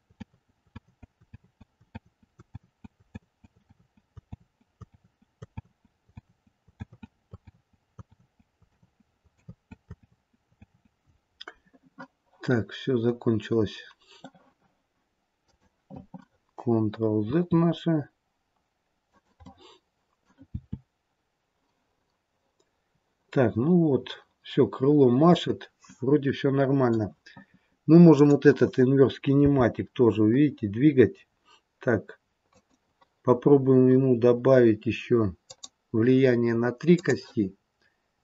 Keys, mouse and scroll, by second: 0.3 ctrl+z, 0.8 ctrl+z, 1.4 ctrl+z, 2.0 ctrl+z, 2.6 ctrl+z, 3.2 ctrl+z, 3.8 ctrl+z, 4.4 ctrl+z, 5.0 ctrl+z, 5.6 ctrl+z, 6.2 ctrl+z, 6.9 ctrl+z, 7.5 ctrl+z, 8.2 ctrl+z, 8.5 ctrl+z, 9.3 ctrl+z, 10.4 ctrl+z, 10.6 ctrl+z, 12.3 middle click, 17.2 click, 17.2 r, 19.4 middle click, 20.4 r, 25.8 middle click, 28.0 click, 29.4 g, 35.4 click, 36.8 click.